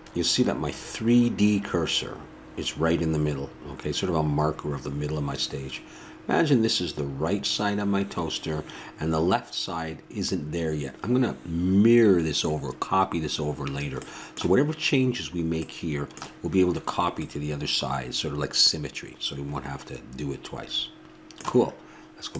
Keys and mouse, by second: 15.7-17.3 middle drag.